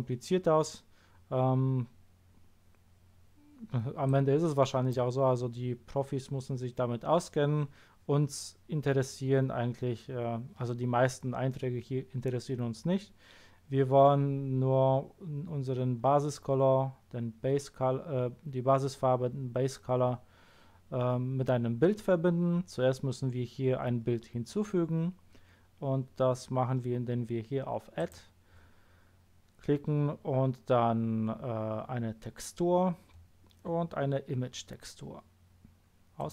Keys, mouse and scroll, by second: 4.0 click, 16.0-28.0 scroll up 1, 28.0 click, 36.2 click.